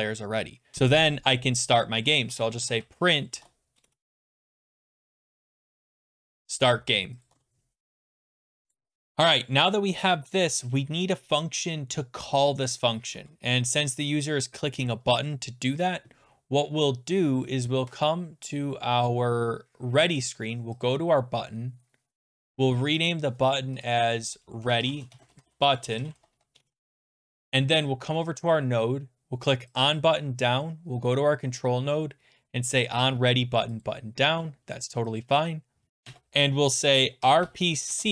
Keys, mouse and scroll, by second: 0.5-6.6 typing, 7.3 click, 7.4 ctrl+s, 9.1 scroll, 9.5-10.0 scroll down 3, 10.0 click, 20.8 click, 23.1 click, 23.8 click, 24.4-30.2 typing, 28.5 click, 29.8 click, 30.0 click, 33.8 click, 35.2 click, 36.0 Return, 36.9-38.1 typing.